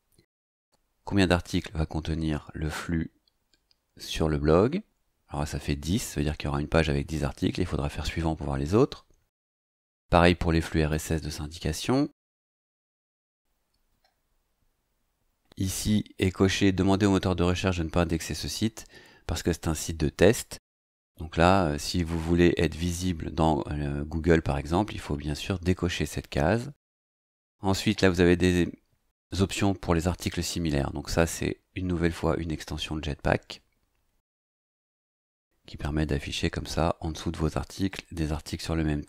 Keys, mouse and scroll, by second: 0.1-14.3 scroll down 2, 14.3-14.7 scroll down 1, 28.4 scroll down 2.